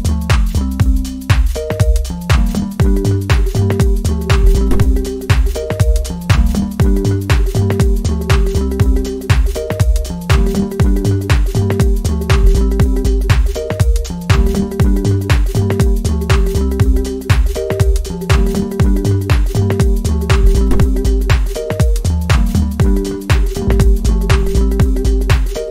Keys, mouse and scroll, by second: 0.1 scroll up 1, 1.3-2.1 scroll down 1, 2.1-6.3 drag, 6.3-6.9 scroll up 1, 6.9 click, 9.0-9.7 scroll down 2, 9.7 click.